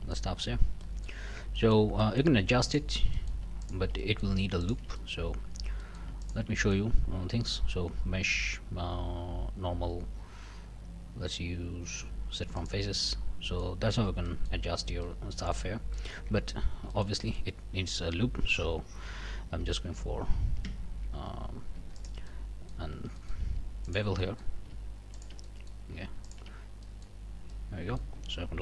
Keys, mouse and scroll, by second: 0.8 middle click, 1.3 Tab, 1.6 middle click, 2.0 middle click, 2.7 middle click, 3.1 shift+middle click, 3.6 shift+middle click, 4.0 shift+middle click, 4.6 shift+middle click, 4.9 shift+scroll up 1, 5.0 shift+middle click, 5.5 shift+scroll down 3, 5.8 shift+click, 6.2 shift+click, 6.6 shift+click, 7.2 q, 12.6 click, 13.1 scroll down 1, 13.5 middle click, 14.0 Tab, 14.3 middle click, 15.0 middle click, 16.0 middle click, 16.3 Tab, 16.5 scroll up 1, 16.9 shift+click, 19.6 2, 20.6 ctrl+KP_Subtract, 22.0 alt+click, 23.2 alt+middle click, 23.9 alt+shift+click, 24.1 alt+shift+scroll up 1, 24.2 alt+shift+middle click, 25.1 alt+shift+click, 25.4 alt+shift+middle click, 26.2 alt+shift+click, 26.6 alt+shift+scroll up 1, 26.8 alt+shift+middle click, 27.2 scroll up 1, 27.5 middle click.